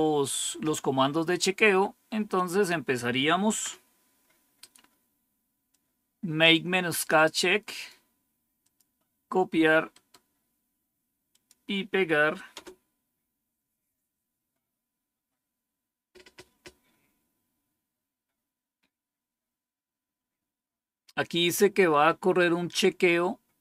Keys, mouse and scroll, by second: 1.5 scroll down 1, 3.4 End, 5.6-7.0 drag, 7.6 right click, 8.5 click, 9.8 right click, 11.2 click, 12.4 Return.